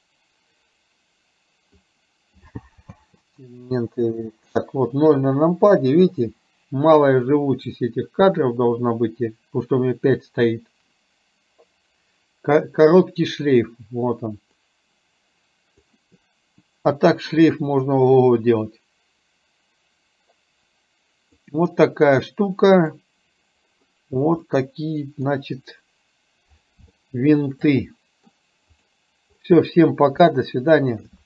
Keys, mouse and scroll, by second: 3.0 space, 5.0 KP_0, 14.7-15.9 drag, 18.2-21.4 drag, 22.9 click, 24.5-25.4 middle drag, 27.0-27.4 shift+middle drag, 27.9-28.3 middle drag, 30.4-31.2 shift+middle drag.